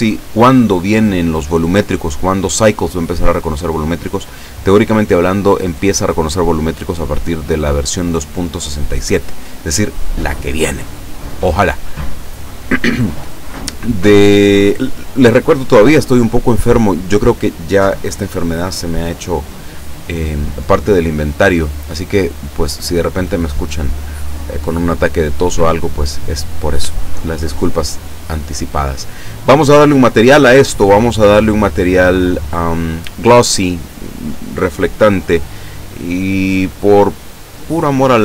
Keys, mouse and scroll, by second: 19.0-19.4 scroll up 1, 20.1 scroll down 1, 21.8 right click, 24.7-25.7 middle drag, 26.3 click, 27.3 click, 30.6 click, 33.0 click, 35.2 click, 36.2-38.2 drag.